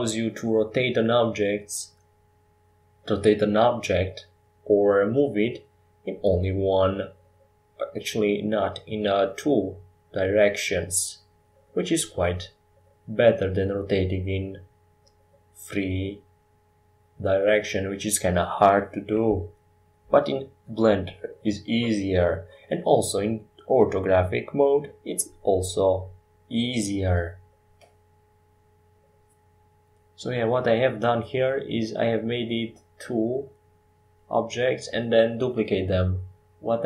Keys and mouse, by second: 0.0 ctrl+j, 7.9-9.4 middle drag, 9.4-13.1 drag, 9.4-13.1 right drag, 13.6-15.8 middle drag, 17.5-19.3 drag, 22.8 KP_5, 23.1 KP_7.